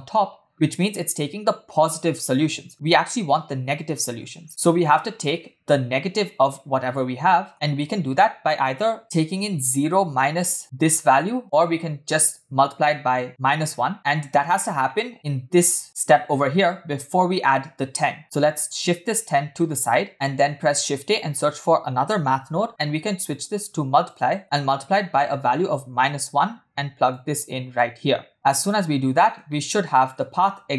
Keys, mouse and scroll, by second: 0.5 scroll down 1, 0.5-3.0 scroll up 4, 0.6 shift+middle drag, 4.4-4.9 scroll down 4, 4.5-4.9 shift+middle drag, 7.2 middle drag, 7.5-7.9 scroll up 2, 13.9 shift+middle drag, 14.3-14.7 scroll up 3, 14.9 shift+middle drag, 15.1-15.8 scroll up 1, 18.2-18.7 scroll down 2, 18.8 click, 20.1 scroll up 1, 20.5 shift+a, 24.9-26.1 drag, 27.2 click, 28.3 click, 29.1-29.5 scroll down 2, 29.5-30.2 shift+middle drag, 30.4-30.7 middle drag.